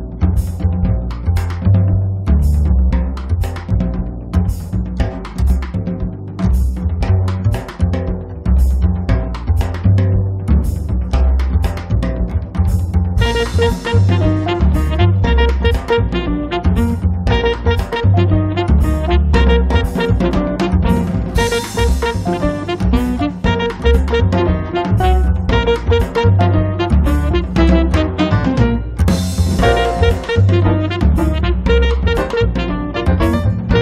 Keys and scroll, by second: 2.7 space, 7.3 f, 8.8 1, 9.2 Return, 10.4 space, 11.6 m, 13.4 1, 13.7 ', 17.4 space, 18.9 m, 20.5 space, 22.4 m, 26.8 1, 27.2 Return, 27.6 space, 29.3 m, 32.3 b.